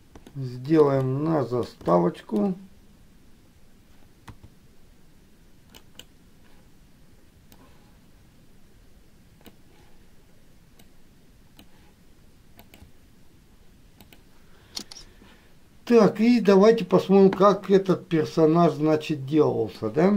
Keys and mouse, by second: 0.7 shift+middle click, 1.2 middle click, 2.2 shift+middle click, 18.2-20.1 middle drag.